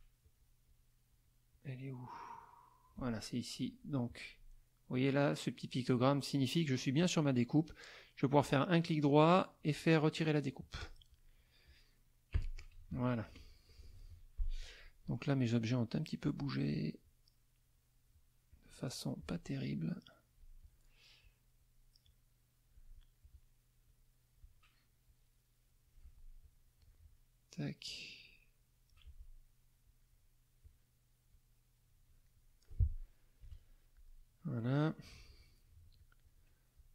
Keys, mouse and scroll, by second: 0.2 click, 1.0 click, 2.0 click, 8.5-10.3 right drag, 10.8 click, 11.3 click, 12.7 Delete, 13.4 middle click, 14.0 F2, 14.5 click, 15.6 click, 17.0-18.2 drag, 18.5 click, 19.0 click, 19.7 click, 20.6 click, 21.2 click, 22.0 click, 23.2 click, 23.8 click, 25.0-26.0 drag, 26.4 click, 26.8 click, 27.9-29.1 drag, 29.8 click, 30.6 click, 31.2-32.6 drag, 33.4 KP_Subtract, 34.0 middle click, 35.3 click, 35.9 shift+click.